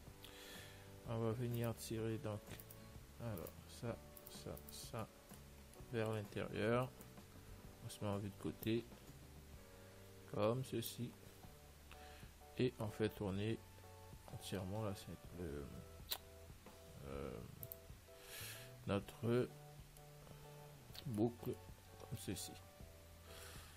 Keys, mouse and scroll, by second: 1.9-6.8 right drag, 5.3-9.0 middle drag, 9.0 click, 11.6-14.8 middle drag, 12.6 a, 12.7 a, 14.8 r, 18.2-23.7 middle drag.